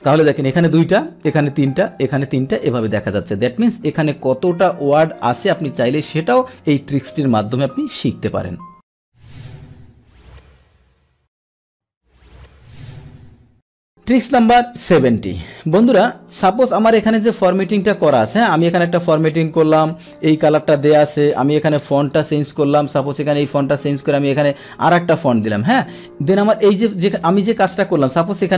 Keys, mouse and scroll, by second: 13.9 click, 16.9 click, 18.5 click, 19.6 Return, 20.1 click, 20.3 click, 21.6 Return, 22.0 click, 23.0 click, 25.1 click, 26.0 ctrl+z, 26.9 click.